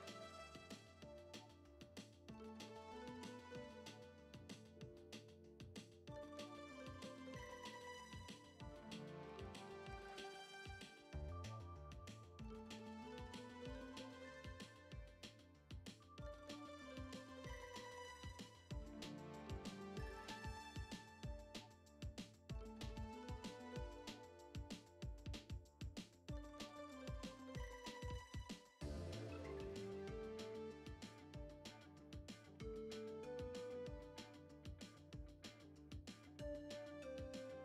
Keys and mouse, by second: 0.9 drag, 2.1 click, 3.3 click, 3.8 drag, 4.3 click, 7.0 shift+middle click, 7.4 middle click, 7.8 click, 9.1 click, 10.5 click, 11.8 click, 13.7 click, 14.4 click, 15.5 click, 16.6 click, 18.3 click, 19.4 drag, 19.8 shift+middle click, 20.3 g, 21.4 click, 21.9 shift+middle drag, 22.7 click, 23.3 click, 24.1 click, 26.8 shift+middle drag, 27.5-27.9 shift+middle drag, 28.5 click, 29.2 click, 30.5 click, 31.7 drag, 32.3 shift+middle click, 32.8 click, 34.1 drag, 34.6 shift+middle drag, 35.0 click, 35.9 shift+middle click, 36.4 click, 36.9 click.